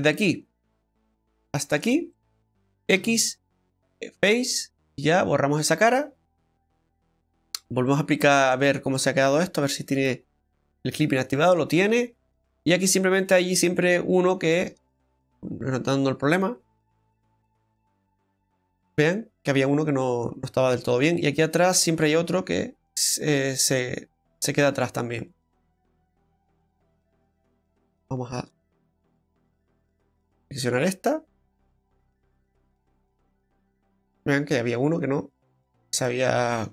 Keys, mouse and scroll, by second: 0.4-1.0 scroll down 2, 1.7 ctrl+shift+right click, 2.1 middle click, 3.0 x, 4.7 middle click, 7.4 click, 7.9 scroll down 2, 8.1 middle click, 10.0 click, 11.2 scroll up 2, 11.5 shift+middle click, 11.9 scroll up 1, 12.4 middle click, 12.4-12.9 scroll up 1, 13.1-13.7 scroll up 2, 13.7 middle click, 14.5 middle click, 15.3 right click, 15.3 click, 16.3 right click, 16.7 click, 18.0 click, 19.5-19.8 scroll down 2, 19.9 middle click, 20.3-20.7 scroll down 2, 20.7 middle click, 21.9-22.6 scroll up 3, 23.5 right click, 26.0 right click, 26.5 scroll up 2, 26.9 shift+middle click, 28.5 shift+middle click, 30.4 right click, 30.7 scroll down 2, 32.0 right click, 33.2 click, 35.6-36.6 scroll down 6, 36.0 middle click.